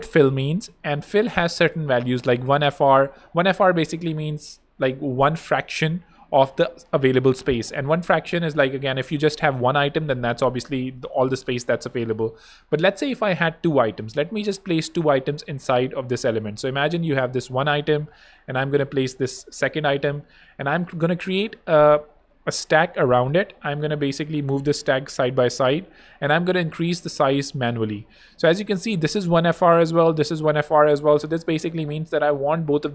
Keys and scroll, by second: 11.3 super+d, 12.9 super+z, 14.3 r, 14.8 f, 17.9 super+d, 18.5 shift+super+d, 21.2 alt+super+Return.